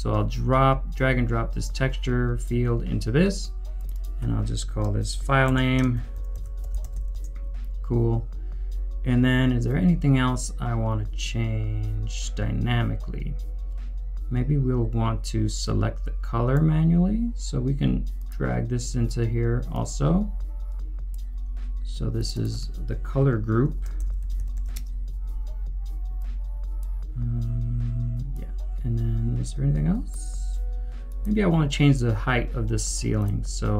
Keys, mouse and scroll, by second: 3.9 double click, 5.9-7.4 typing, 22.3 Return, 22.3 double click, 23.2 Home, 23.7-25.1 typing.